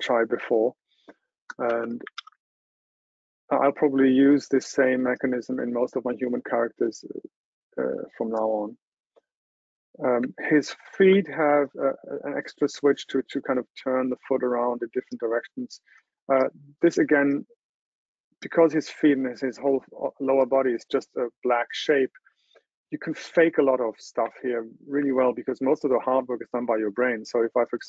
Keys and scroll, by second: 2.3 super+w.